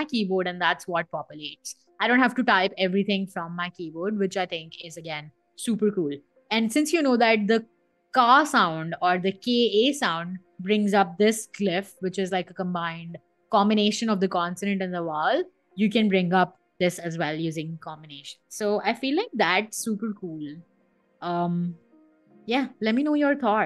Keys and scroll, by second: 9.2 k, 10.9 1, 18.3-20.4 typing, 21.5 n, 22.2 1.